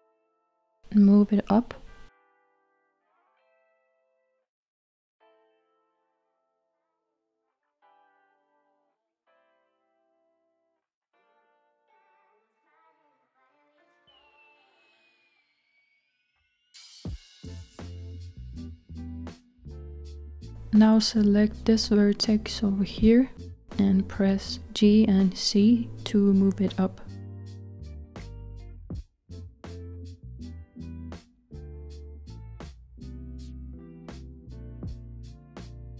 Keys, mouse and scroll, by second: 0.2 g, 6.0-6.4 z, 7.8-15.9 middle drag, 15.9 KP_1, 17.5-18.3 scroll up 1, 18.3-19.1 scroll up 1, 22.1 click, 24.3 g, 29.1 z, 29.2 z, 29.2 z, 29.3 z, 32.3-33.3 scroll down 2, 33.3-35.9 middle drag.